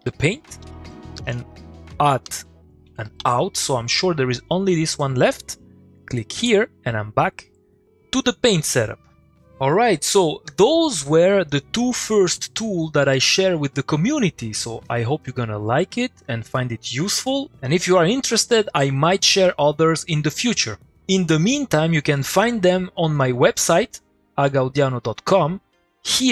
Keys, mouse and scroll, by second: 1.1 Left, 2.8 shift+o, 7.2 click.